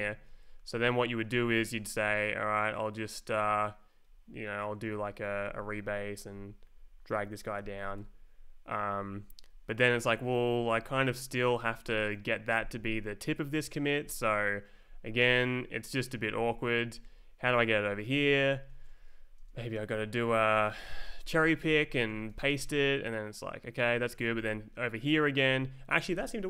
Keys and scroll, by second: 0.4 Down, 2.0 Up, 4.4 e, 5.1 Up, 6.3 ctrl+j, 7.6 m, 8.0 Return, 9.1 Down, 9.5 Up, 9.9 Down, 10.7 Up, 11.2 Down, 11.6 Up, 12.1 Down, 14.5 Left, 14.6 Down, 15.2 space, 15.8 Right, 16.3 Down, 16.8 Up, 17.5 Left, 17.7 Right, 18.0 Down, 18.5 Up, 18.9 Left, 19.1 Down, 19.4 space, 19.9 Right, 20.3 Down, 20.9 shift+c, 21.2 Left, 21.4 Down, 21.6 space, 22.1 Right, 22.3 shift+v, 22.5 Return, 23.9 Left, 24.2 Down, 24.3 space, 25.0 Right, 25.4 Down.